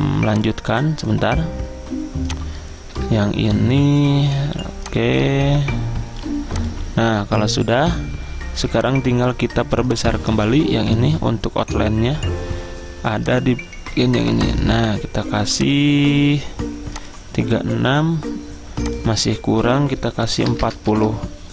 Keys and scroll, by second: 3.0 Caps_Lock, 20.3-21.5 typing.